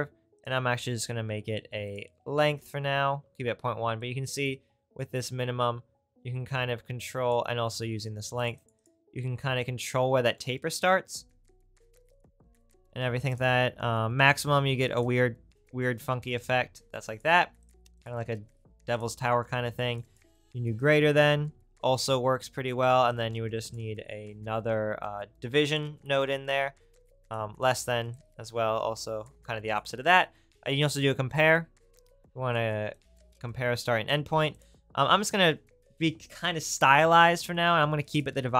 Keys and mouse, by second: 17.7 right click.